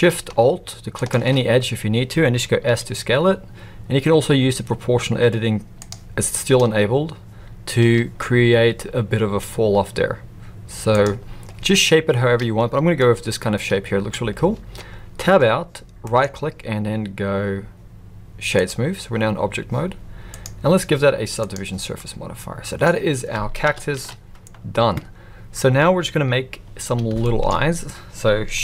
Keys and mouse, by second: 2.6 s, 9.4 s, 12.9-14.0 middle drag, 15.2 Tab, 16.0-18.7 right drag, 20.3-21.6 drag, 21.9-22.8 middle drag, 23.6 KP_1, 23.9 alt+a, 27.2 shift+middle drag.